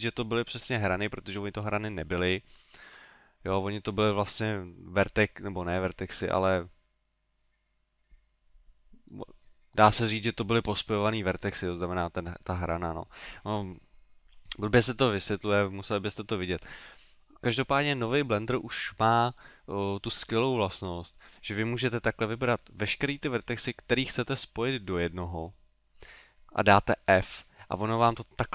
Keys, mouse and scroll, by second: 19.9 middle click, 20.5 middle click, 23.6 middle click, 24.5 middle click, 27.7 middle click, 27.7 f.